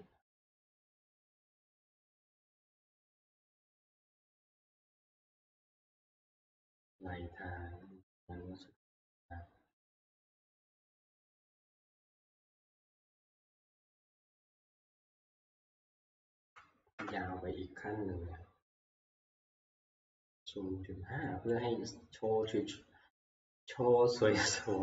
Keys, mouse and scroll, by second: 2.7 click, 5.2 click, 5.7-7.0 scroll, 9.0 click, 10.9 click, 12.8 click, 14.2 click, 14.5 click, 15.9 ctrl+v, 17.0 Return, 21.6 click, 23.5 click.